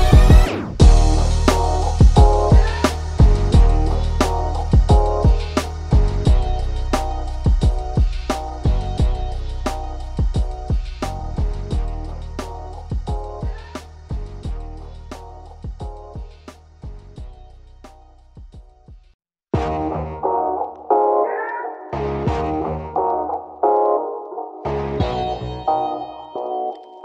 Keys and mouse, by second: 4.3 ctrl+z, 4.7-6.3 drag, 6.3 click, 6.4 ctrl+=, 7.6-9.2 drag, 10.0 ctrl+-, 11.4 right click, 11.8-13.6 drag, 13.8 Right, 14.3 Down, 14.7 click, 15.2 alt+click, 16.2 Down, 16.3 Left, 17.1-18.1 alt+drag, 19.6-21.3 drag, 21.3 Right, 21.5 Up, 21.7 Right, 21.8 Down, 22.6-23.8 drag, 24.1 ctrl+0, 25.6 right click, 26.2-27.0 drag.